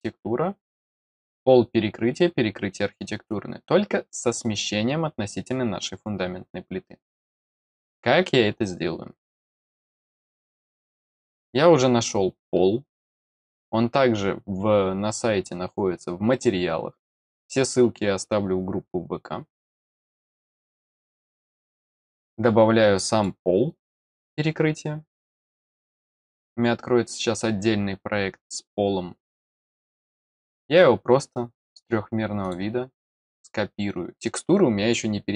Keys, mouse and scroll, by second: 1.0 click, 10.7 click, 19.5 click, 19.7 click, 21.4 click, 22.2-23.2 drag, 27.5-32.4 scroll up 3, 32.4 click.